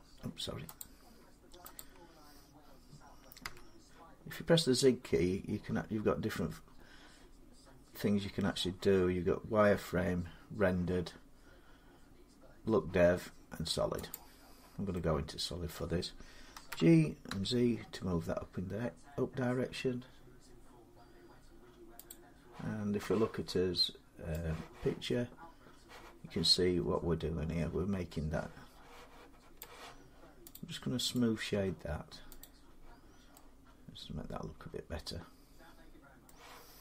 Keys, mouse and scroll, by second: 0.6 click, 1.6 click, 3.2 z, 13.9 click, 14.8 scroll up 1, 15.6 middle click, 16.4-17.1 typing, 21.9 click, 29.4 click, 30.3 click, 30.9 right click, 32.2 click, 32.8 middle click, 32.9 middle click, 35.5 scroll down 3, 36.0 middle click.